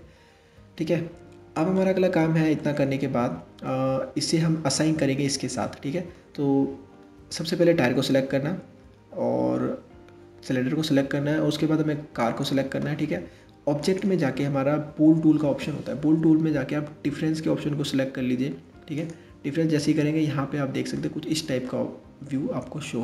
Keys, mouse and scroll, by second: 2.2-5.2 middle drag, 8.2 middle click, 11.8 shift+click, 13.4-16.6 drag, 19.4-23.0 middle drag.